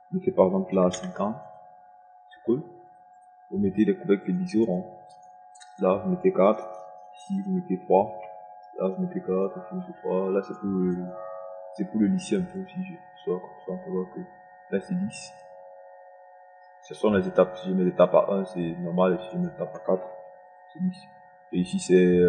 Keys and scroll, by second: 1.3 KP_5, 1.7 KP_0, 7.3 KP_4, 8.7 KP_3, 9.6 KP_4, 10.4 3, 20.9 KP_4.